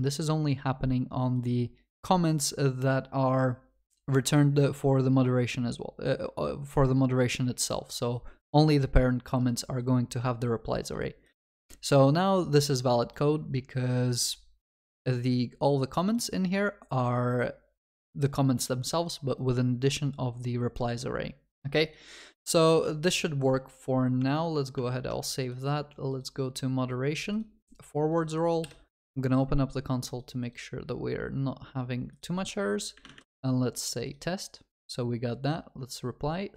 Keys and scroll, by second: 22.8 ctrl+s.